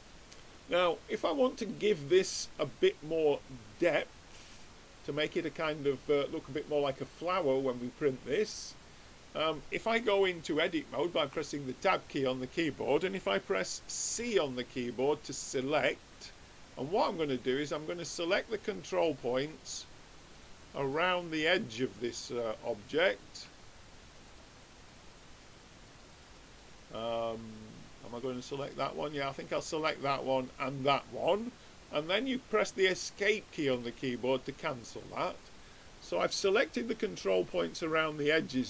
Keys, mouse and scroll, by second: 7.0-8.8 drag, 11.2 Tab, 14.1 c, 34.9-37.1 middle drag.